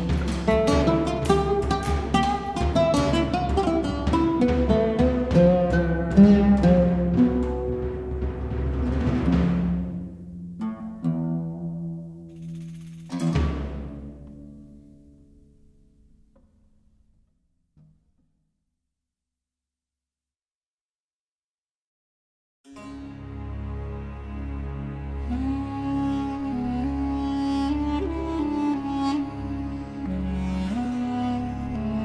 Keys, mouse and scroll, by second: 11.2-16.0 drag, 15.9-16.7 typing, 16.5-27.4 drag, 27.4-32.0 drag.